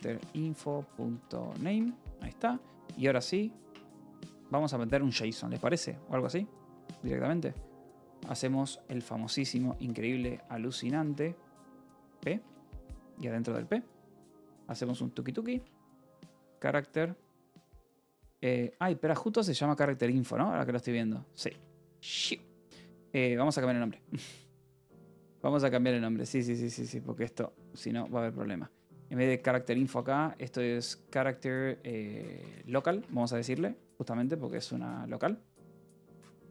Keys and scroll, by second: 0.0-2.4 typing, 2.3 ctrl+s, 3.8 Tab, 4.4 BackSpace, 8.5 [, 9.9-12.4 typing, 15.1-17.2 typing, 18.4 Escape, 19.1 k, 20.2-22.7 typing, 24.1 ctrl+o, 24.3-27.4 typing, 27.8 Return, 28.6 g, 29.1 l, 29.6 BackSpace, 32.1-36.5 typing.